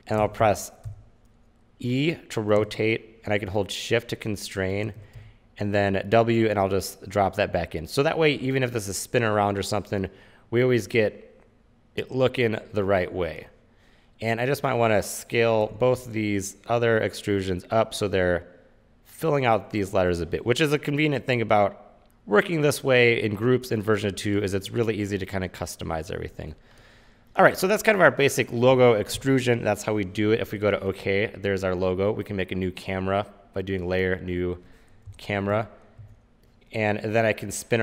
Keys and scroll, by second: 0.1-1.5 typing, 5.3 w, 16.1 r, 35.2 Return, 35.7 c.